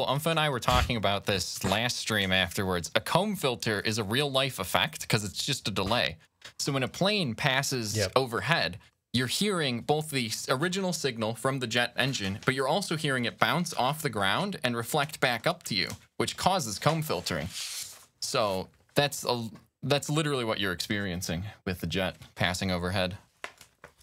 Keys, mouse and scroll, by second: 0.2 space, 0.3 ctrl+scroll down 1, 1.4 ctrl+s, 2.4 ctrl+scroll up 1, 3.6 click, 4.2 scroll up 1.